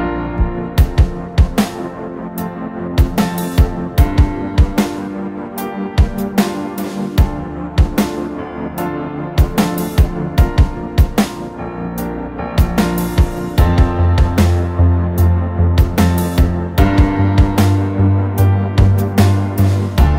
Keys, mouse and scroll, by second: 0.6 scroll down 1, 0.8 middle click, 3.0 scroll up 1, 3.6 typing, 4.5 middle click, 7.7 typing, 8.5 Return, 9.3 scroll down 1, 9.4 space, 10.3-11.5 scroll down 1, 11.5 typing, 11.8 double click, 13.5 ctrl+z, 13.7 ctrl+z, 14.1 space, 14.4 double click, 14.6 right click, 16.2 typing, 16.6 scroll up 1, 18.2 typing, 19.7 Return.